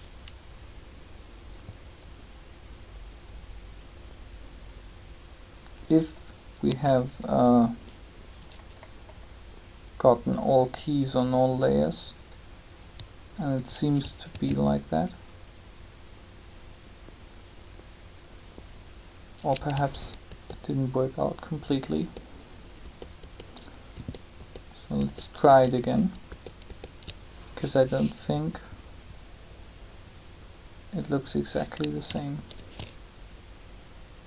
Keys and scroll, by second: 14.1 alt+a, 20.2 ctrl+z, 21.9 ctrl+z, 32.5 alt+a.